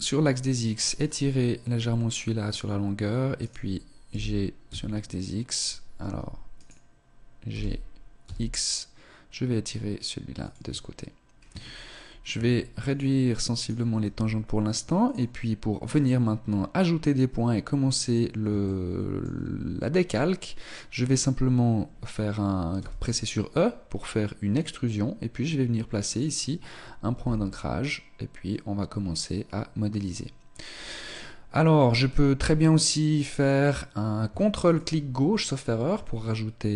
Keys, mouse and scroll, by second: 3.4 right click, 4.1 b, 6.6 right click, 7.5 g, 12.4 s, 13.6 right click, 14.0 s, 15.9 right click, 18.6 shift+middle click, 22.3 e, 27.1 r, 34.8 ctrl+click.